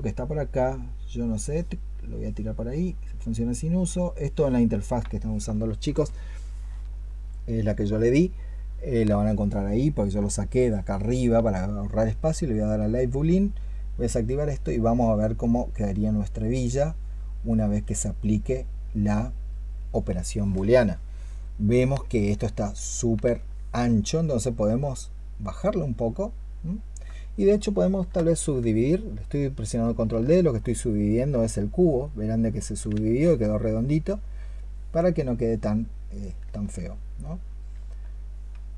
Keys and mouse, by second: 14.3 double click, 28.4 ctrl+d, 29.8 ctrl+d, 31.9 double click.